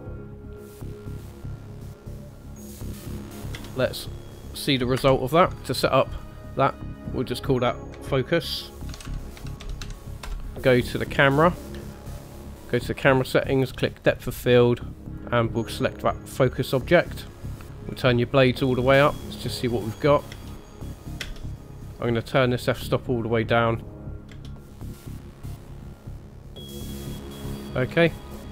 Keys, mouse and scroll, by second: 3.7 click, 3.7 space, 3.9 click, 5.0 KP_0, 6.2-6.7 scroll up 1, 8.1 click, 11.6 click, 12.3 click, 13.5 click, 14.0 click, 15.1 click, 17.9 click, 19.6 click, 20.0-20.3 scroll up 2, 20.3 space, 21.3 space, 21.9 click, 23.7 click, 23.8 click, 23.8 space, 24.4 space.